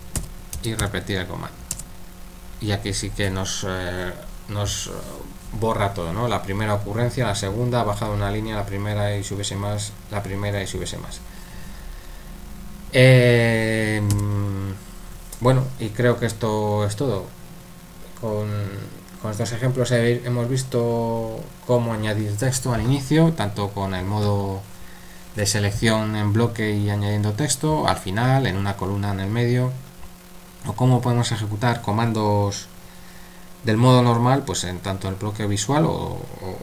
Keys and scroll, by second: 0.2-1.8 typing, 14.1 u.